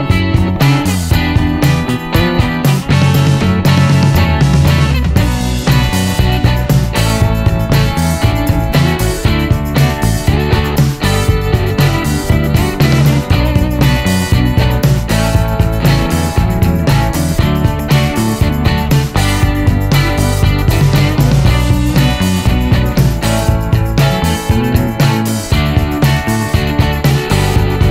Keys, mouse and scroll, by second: 0.1 c, 1.0-1.9 scroll down 2, 1.9-3.8 middle drag, 5.2 click, 6.0 scroll down 1, 9.7 click, 10.5 click, 12.3 ctrl+s, 14.4 click, 16.2 click, 18.4 click, 19.5 click, 22.2 click, 25.7 click, 26.8 click.